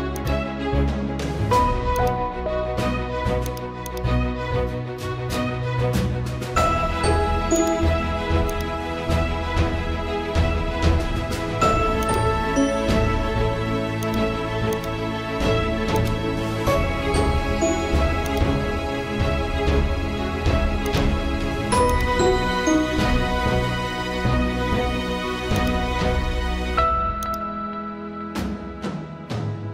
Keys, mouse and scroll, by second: 0.1 click, 3.0 right click, 4.5 click, 5.8 ctrl+t, 6.8 right click, 7.6-15.9 drag, 15.9 alt+click, 17.0 ctrl+t, 18.3-20.0 drag, 20.0 right click, 20.8-27.2 drag.